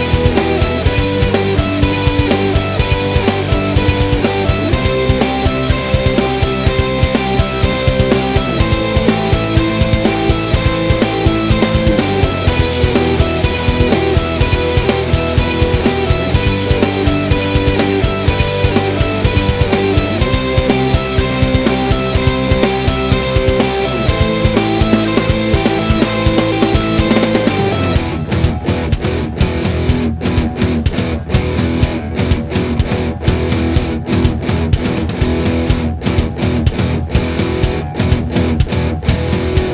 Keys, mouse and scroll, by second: 0.0 middle click, 0.8 click, 1.3 click, 2.5 scroll up 1, 2.6 g, 5.9 Escape, 6.1 click, 6.3 click, 6.8 g, 7.9 Escape, 8.2 e, 10.4 click, 10.8 shift+click, 15.6 click, 15.8 middle click, 16.2 click, 16.4-17.5 middle drag, 17.5 click, 18.1 e, 19.6 click, 19.7-21.3 middle drag, 20.6 ctrl+z, 21.3 click, 21.6 scroll up 1, 21.8-24.0 middle drag, 22.4 ctrl+r, 24.2 click, 24.6 click, 24.9 e, 26.7 click, 27.6-30.6 middle drag, 30.5 g, 30.6 click, 30.7-32.2 middle drag, 31.6-32.1 scroll, 32.1 Tab, 32.2 click, 32.4 middle click, 33.3 click, 34.0 click, 34.5 click, 34.8-39.4 middle drag, 37.5 scroll down 1, 38.3 shift+a, 39.4-39.7 drag.